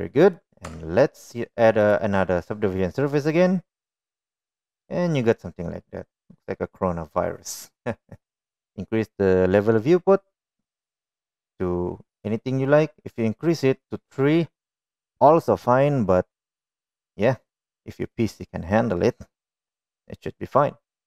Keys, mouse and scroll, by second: 0.8 middle click, 1.7 Tab, 2.4-4.6 drag, 5.2-5.6 middle drag, 16.6-18.0 middle drag, 18.7-19.1 middle drag.